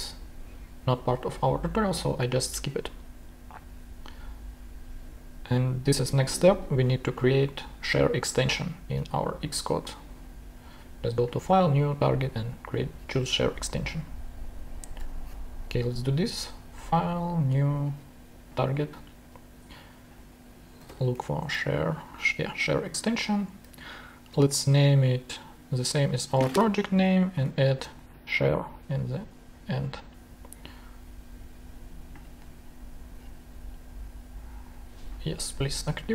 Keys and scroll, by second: 13.6 super+Tab, 20.5-21.9 typing, 23.9 shift+super+i, 27.0 super+v, 27.4-28.5 typing.